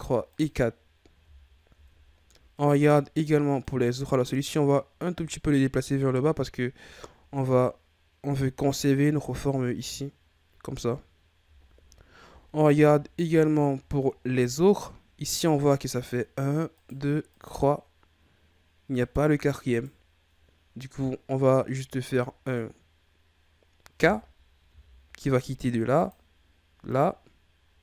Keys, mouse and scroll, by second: 0.3 right click, 0.7-1.4 scroll down 3, 1.4-3.6 shift+scroll up 9, 3.6 right click, 6.4-7.6 scroll down 6, 11.7-12.9 ctrl+scroll up 8, 13.0-13.4 shift+scroll up 2, 14.0 ctrl+scroll down 1, 16.0 right click, 16.8 right click, 17.3 right click, 19.0 right click, 19.7 right click, 23.6-24.0 scroll up 1, 24.6 k.